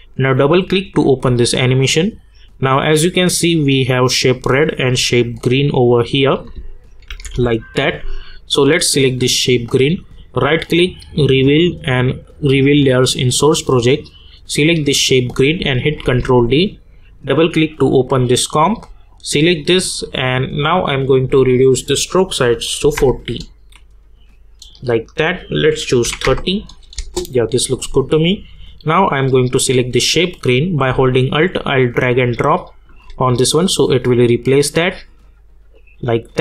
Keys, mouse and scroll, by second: 3.7 click, 7.1 =, 7.3 =, 8.5 click, 10.1 right click, 12.8 click, 16.0 ctrl+d, 17.1 click, 21.5 click, 25.0-26.9 drag, 26.9 Return, 28.1-35.6 drag.